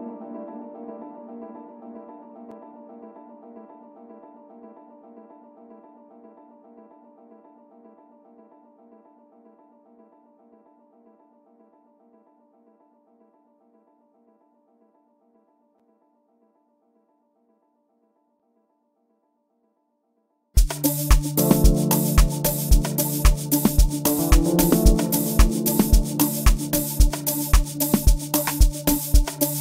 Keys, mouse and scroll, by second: 8.0 F1, 8.0 r, 8.3 space, 18.5 right click.